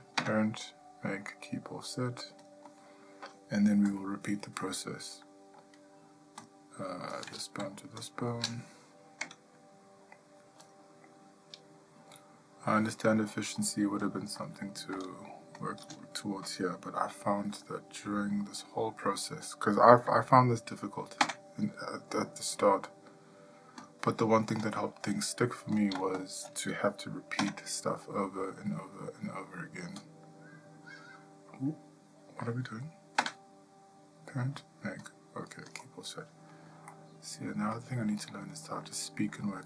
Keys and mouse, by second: 0.7 typing, 4.4 shift+middle click, 5.7 shift+middle click, 14.9 click, 17.6 shift+middle click, 18.3 ctrl+middle click, 19.1 middle click, 19.7 shift+middle click, 37.4 middle click, 38.3 shift+middle click, 38.8 middle click, 39.4 shift+middle click.